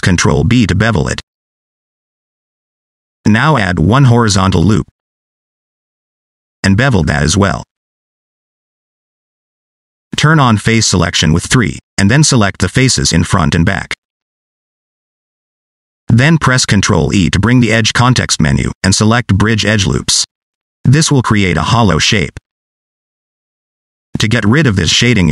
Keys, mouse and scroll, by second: 0.2 ctrl+b, 1.9-2.4 scroll down 1, 2.4 click, 4.3 ctrl+r, 7.5 ctrl+b, 8.8 click, 11.3 3, 12.4 click, 12.8 scroll down 2, 13.0 middle click, 14.9 shift+click, 15.5 middle click, 18.8 ctrl+e, 21.5 scroll up 2, 21.7 middle click, 22.2 middle click, 23.8-25.3 scroll down 1.